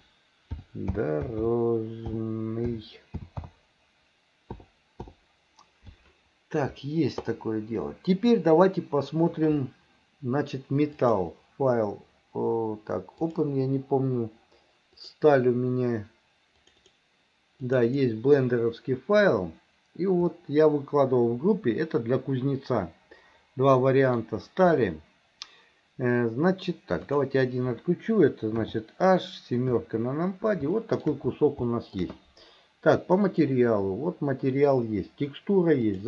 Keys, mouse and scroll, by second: 11.0-13.6 drag, 20.4-24.2 middle drag, 24.8-26.7 middle drag, 27.1 click, 28.6 h, 29.7 KP_7, 30.8 shift+middle click, 31.7 shift+middle click.